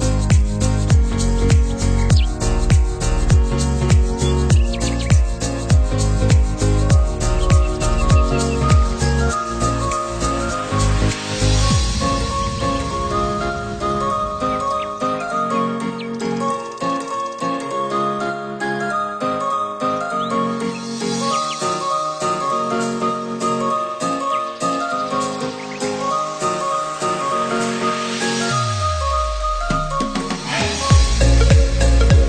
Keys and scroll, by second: 26.4 ctrl+0.